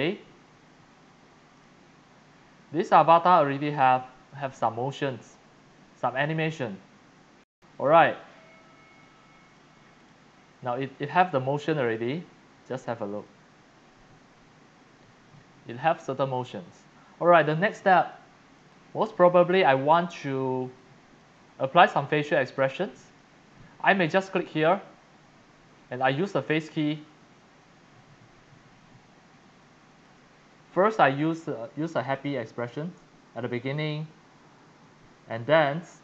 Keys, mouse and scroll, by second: 1.5 click, 7.8 click, 9.0 click, 10.0 click, 11.1 click, 11.6 click, 13.2-15.3 drag, 17.3 click, 17.9 click, 18.1-18.6 scroll up 3, 18.6 x, 18.7 click, 19.3-19.8 x, 19.4 click, 20.0 x, 20.2 click, 20.4 click, 20.7 x, 20.8 click, 21.4 click, 21.8-23.8 typing, 22.7 click, 24.6 click, 26.3 click, 30.0 click, 32.1 click.